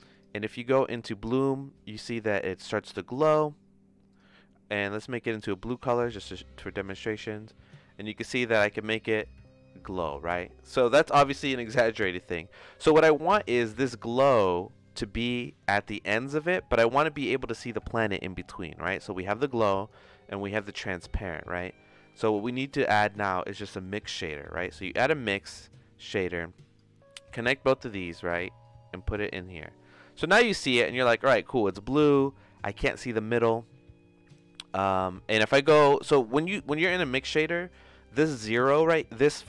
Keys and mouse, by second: 0.1 click, 1.3 click, 4.1 click, 7.3-8.9 drag, 13.0-15.4 drag, 19.5 click, 20.6-22.3 drag, 22.4 shift+a, 26.2 click, 27.5 click, 28.6-29.6 drag, 30.5 click, 31.6 middle click, 36.2-39.4 drag.